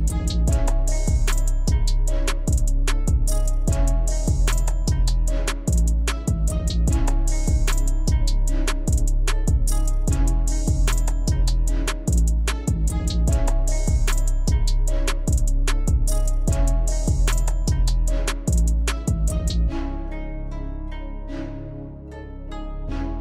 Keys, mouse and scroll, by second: 0.2 alt+scroll down 1, 2.0 click, 6.3 click, 9.8-14.4 drag, 15.7-16.9 scroll up 1, 17.8 click.